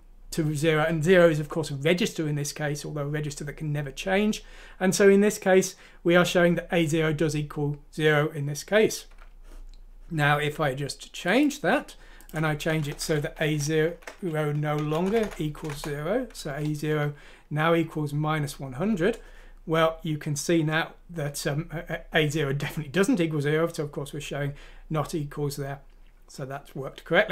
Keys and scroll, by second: 13.0 Home, 13.4-15.2 typing, 15.5 F6, 15.7 Return.